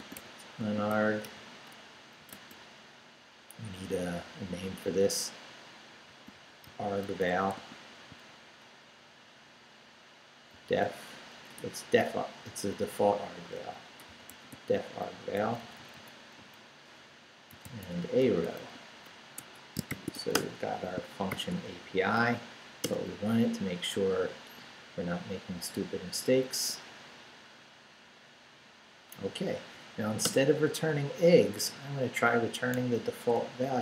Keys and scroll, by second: 0.0-2.3 typing, 5.8-8.1 typing, 10.5 d, 11.6 BackSpace, 12.1 Left, 13.3-15.0 typing, 15.2 Right, 17.3-20.1 typing, 19.4 Escape, 20.3 Return, 20.9 shift+Return, 21.3 shift+;, 21.8 shift+Up, 22.8 Return, 30.3 Return, 31.1 Down, 32.8 a, 33.3 BackSpace.